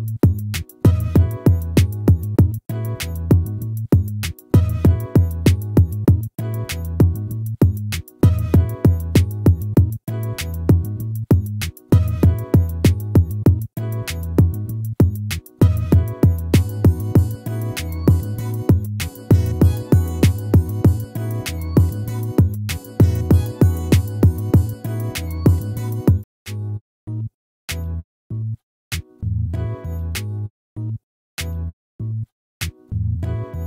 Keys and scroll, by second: 31.6 ctrl+-.